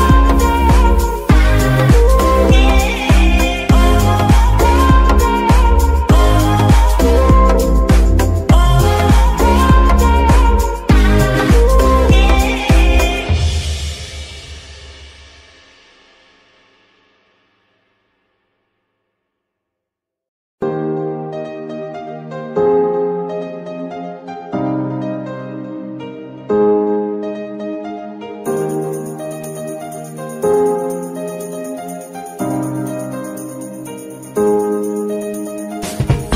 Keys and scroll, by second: 0.2 z, 12.6 z, 16.2 KP_3, 16.7 g, 20.2 shift+g, 21.0 x, 24.0 g, 24.2 y, 26.3 g, 26.5 y, 27.7 z.